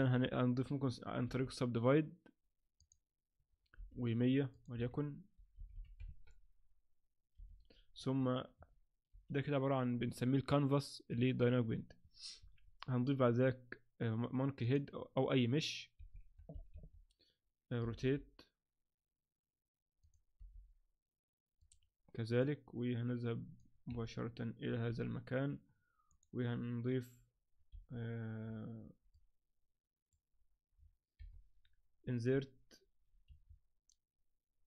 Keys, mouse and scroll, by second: 0.1 Tab, 0.8 Tab, 1.2 w, 3.8 t, 4.5 click, 5.7 0, 7.4 t, 8.0 Tab, 9.1 shift+c, 12.4 shift+a, 16.7 KP_1, 17.8 r, 20.4 r, 22.4 click, 23.9 KP_7, 24.9 g, 27.7 KP_1, 28.4-29.1 scroll up 3, 29.1 click, 30.8-31.5 scroll down 3, 31.2 KP_7, 33.3 Escape.